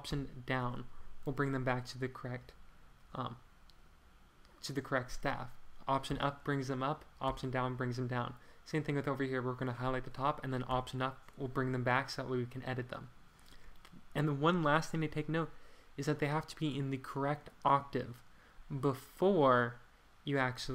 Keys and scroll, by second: 0.1 alt+Down, 6.1 alt+Up, 7.2 alt+Page_Down, 10.7 alt+Page_Up.